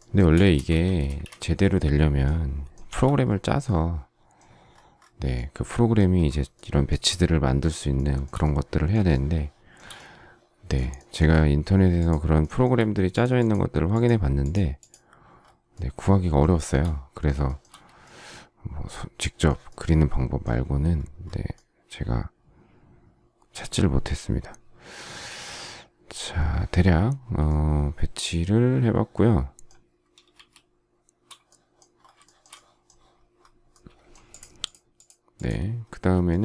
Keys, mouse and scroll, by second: 0.5 space, 3.2 k, 6.5 shift+middle click, 7.9 shift+middle click, 9.1 shift+middle click, 10.9 shift+middle click, 11.9 shift+click, 12.3 shift+middle click, 16.5 shift+middle click, 17.5 shift+middle click, 30.3 shift+s, 32.3 shift+middle click.